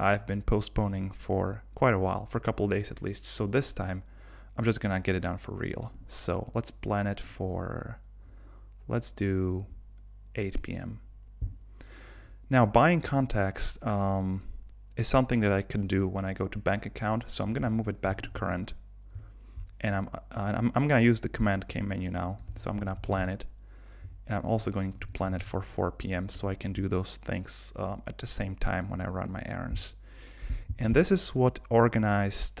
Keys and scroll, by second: 17.6 super+k, 19.2 Return, 22.5 super+k, 24.0 Return, 26.4 Return.